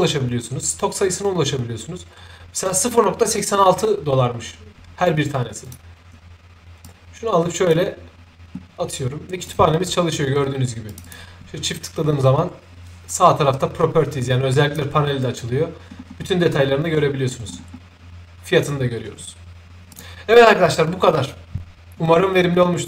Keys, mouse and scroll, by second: 5.6 click, 6.8 shift+click, 9.4 shift+click, 10.9 shift+click, 14.2 shift+click, 15.9 middle click, 15.9-16.3 scroll down 1, 17.4 shift+middle click, 17.4-17.7 scroll up 1, 19.9 shift+click.